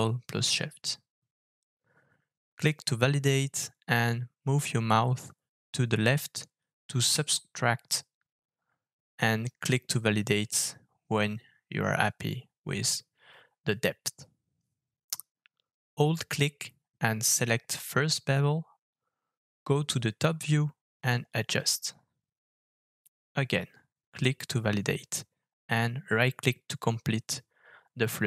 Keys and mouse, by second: 21.3 KP_7.